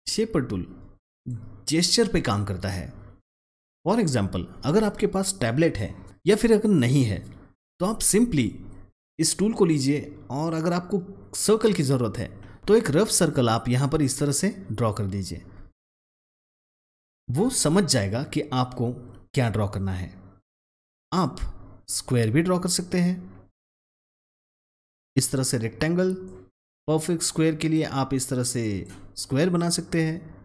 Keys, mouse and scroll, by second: 0.0-3.6 drag, 3.8 click, 12.6 ctrl+z, 12.7-20.1 drag, 21.1-26.2 drag, 22.5-24.0 drag, 26.3-28.7 drag.